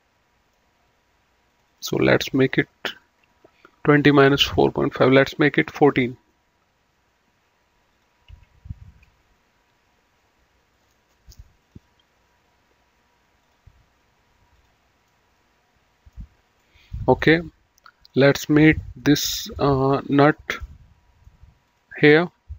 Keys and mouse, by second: 1.5 click, 5.3 KP_1, 5.6 KP_4, 5.9 KP_Enter, 7.9 click, 8.3 ctrl+q, 10.7 click, 12.3 click, 13.5 click, 15.1 middle click, 16.6 middle click, 18.0 click, 19.0 middle click, 20.1 click, 20.5 middle click, 21.6 click.